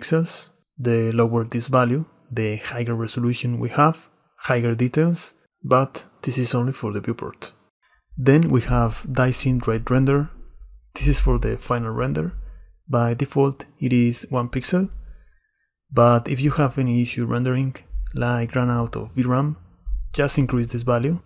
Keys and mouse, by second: 3.7-5.2 drag, 8.4-11.1 drag, 20.1-21.2 drag.